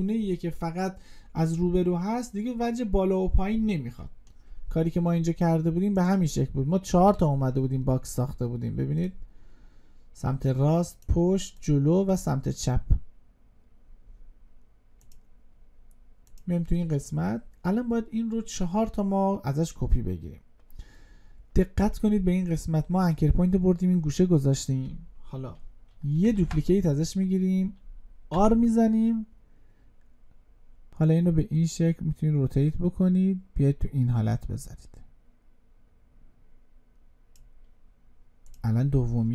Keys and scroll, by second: 26.1 ctrl+d.